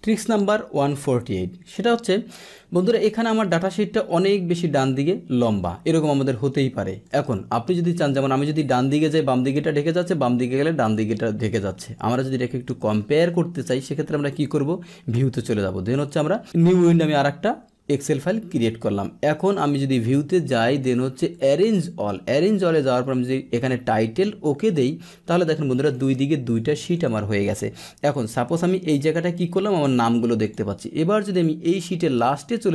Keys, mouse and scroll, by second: 1.6 click, 4.1-5.8 drag, 7.0 click, 8.8-10.8 drag, 11.3 click, 14.3 click, 16.7 click, 19.5 click, 21.3 click, 24.6 click, 25.9 click, 26.4 click, 26.9 click, 28.1-29.1 drag, 30.4 click, 31.4-32.7 drag.